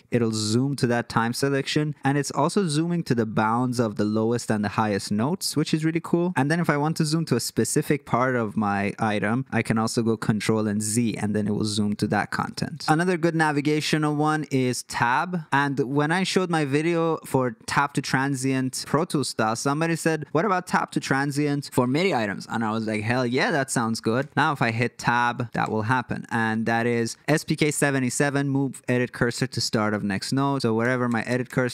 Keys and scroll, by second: 10.0 ctrl+z, 12.6 super+z, 15.0 Tab, 19.8 Tab, 23.9 Tab, 24.1 Tab, 24.3 Tab, 25.6 Tab, 30.8 Tab, 31.0 Tab, 31.3 Tab, 31.4 Tab, 31.6 Tab.